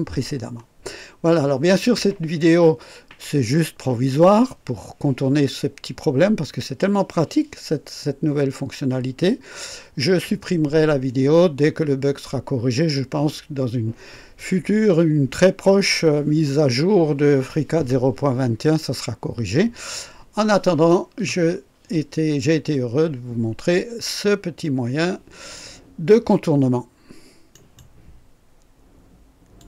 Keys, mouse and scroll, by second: 27.5 right click, 29.5 click.